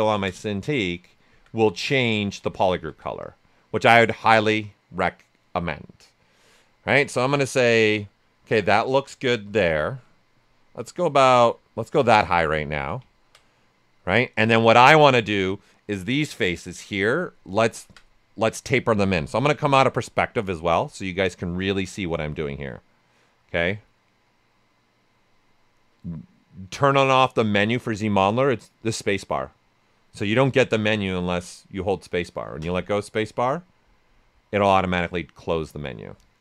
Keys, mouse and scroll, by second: 17.2 right click, 19.3 click, 31.1 space.